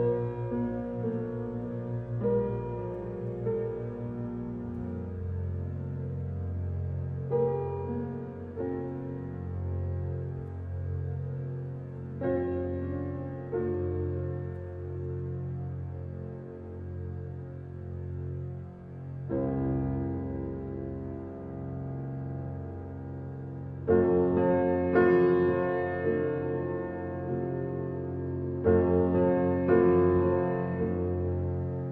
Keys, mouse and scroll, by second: 0.5-1.2 scroll down 1, 1.2 click, 2.3 drag, 3.8 h, 4.6 click, 5.0-5.6 middle drag, 5.6 click, 6.1-7.5 scroll up 2, 7.5 h, 7.9 click, 8.4 middle click, 8.6 Tab, 9.2-12.9 middle drag, 14.4-15.4 drag, 16.9-17.3 scroll up 2, 17.3-20.3 shift+middle drag, 20.3-21.9 drag, 21.9-22.9 middle drag, 22.9 click, 23.8-25.0 middle drag, 25.0 x, 30.5-31.9 middle drag.